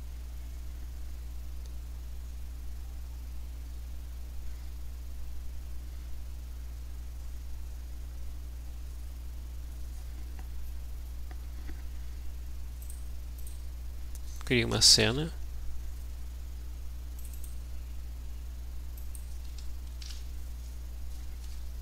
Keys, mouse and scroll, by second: 12.9 click, 13.4 click, 14.6-15.6 typing, 17.2-18.3 drag, 19.0 click, 20.1 l, 21.4 Return.